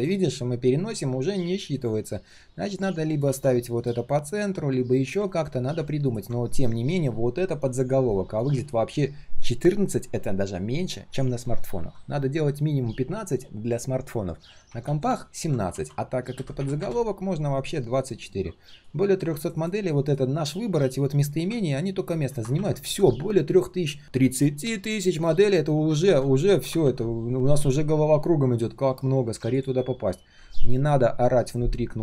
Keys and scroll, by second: 3.2 ctrl+z, 5.2 ctrl+z, 15.7 ctrl+a.